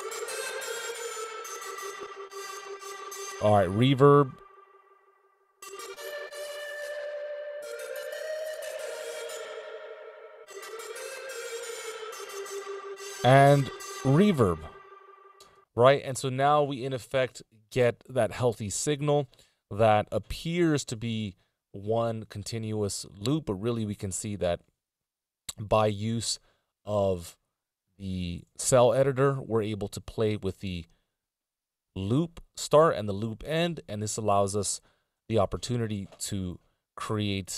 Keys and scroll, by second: 15.8 space, 35.4 Return, 36.6 e.